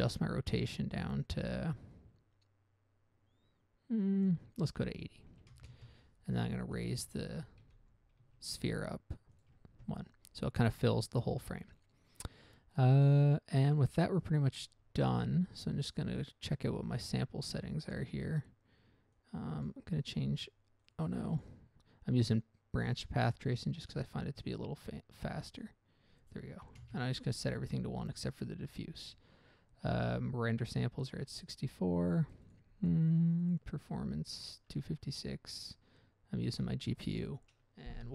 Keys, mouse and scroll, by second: 4.6 click, 4.9 click, 5.0 click, 5.7 typing, 6.0 Return, 7.1 right click, 8.0 g, 8.5 z, 9.7 ctrl+click, 16.2 click, 16.8-17.3 scroll down 1, 17.3 scroll down 1, 18.1 click, 18.5 scroll down 1, 19.5 click, 20.0 click, 21.2 click, 21.4 double click, 21.7 double click, 24.1 click, 24.8 click, 25.3 click, 25.9 click, 27.0 1, 27.1 Return, 31.6-32.0 scroll down 1, 32.8 click, 33.4 click, 33.8 double click, 34.1-34.6 scroll down 1, 34.6 scroll down 1, 35.0-35.9 scroll up 1, 35.9 scroll up 1, 36.6 scroll up 1.